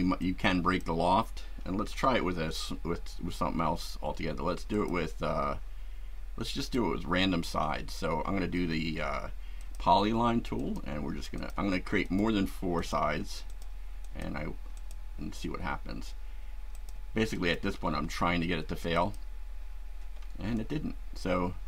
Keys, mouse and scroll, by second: 0.2-1.0 drag, 1.8 Delete, 4.7 click, 6.6 click, 9.6 click, 10.6 click, 11.3 click, 12.0 click, 12.8 click, 13.5 click, 14.0 click, 14.7 click, 16.7 click, 17.3 right click, 18.9 click, 20.6-21.6 shift+middle drag.